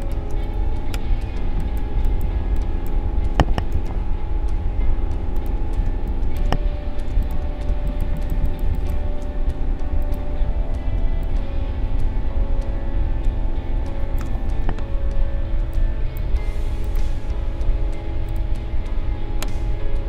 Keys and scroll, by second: 3.7 ctrl+z, 5.8 space, 7.7 space.